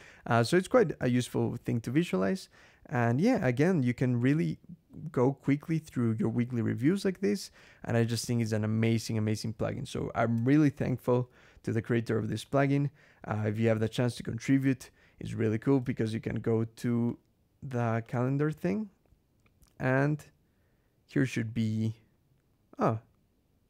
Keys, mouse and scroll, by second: 0.3 click, 5.3 click, 6.0 click, 10.3 ctrl+,, 11.4 scroll down 2, 12.3 click, 13.3 scroll down 2, 14.3 scroll down 2, 15.1 scroll down 2, 15.9 click, 16.9 click, 17.9 click, 18.9-20.4 scroll down 8, 20.7-21.3 scroll down 4, 22.1 scroll up 1, 23.0 scroll down 1.